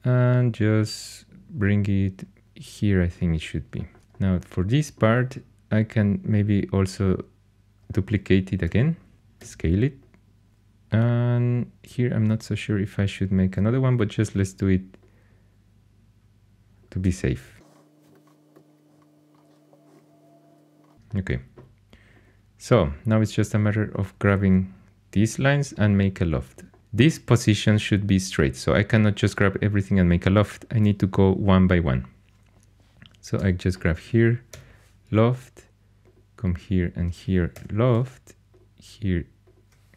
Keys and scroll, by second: 8.6 shift+d, 9.4 s, 14.2 shift+d, 17.0-17.4 typing, 18.1 Escape, 18.5 s, 19.9-21.1 typing, 34.5 l, 37.5 l.